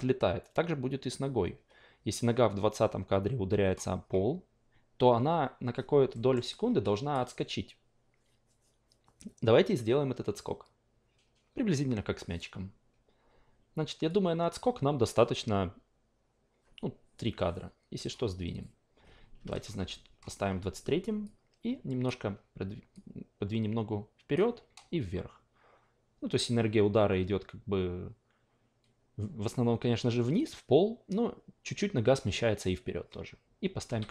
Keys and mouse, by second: 6.2 alt+middle click, 6.5 alt+click, 14.1-18.1 drag, 19.5 alt+middle click, 19.8 w, 22.0-29.6 drag, 33.9 s.